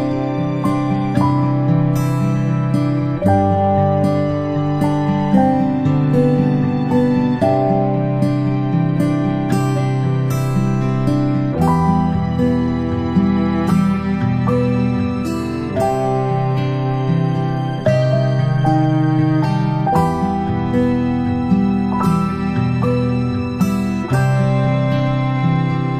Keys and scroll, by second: 10.3 ctrl+shift+[.